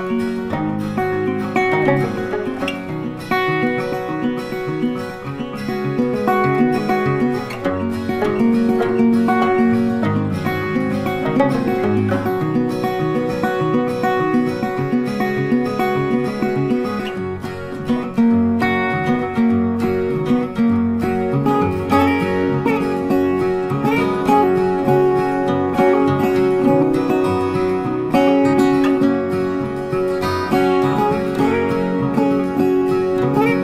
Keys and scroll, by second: 0.5 ctrl+d, 8.6 Delete, 11.3 ctrl+d, 22.8 ctrl+t.